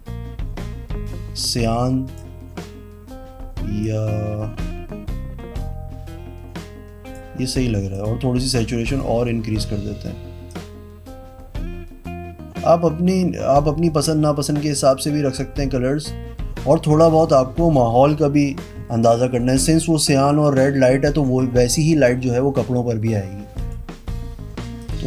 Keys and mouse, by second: 3.8 click, 7.9 click, 8.3 click, 8.8 click, 10.4 click, 23.5 click, 24.7 click.